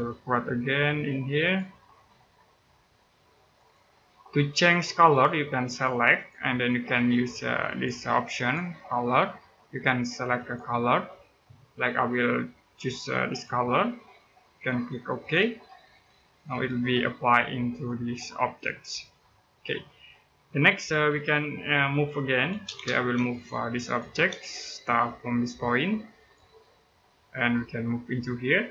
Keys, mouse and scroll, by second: 1.2 click, 4.0-4.4 scroll down 1, 4.4 middle click, 4.9 click, 13.1 click, 16.3 Escape, 18.4 scroll down 1, 18.9 middle click, 22.4 space, 23.1 click, 24.1 space, 24.4-24.9 scroll up 1, 25.9 click, 26.5-26.9 scroll down 1, 26.9 middle click, 27.5-27.9 scroll up 1.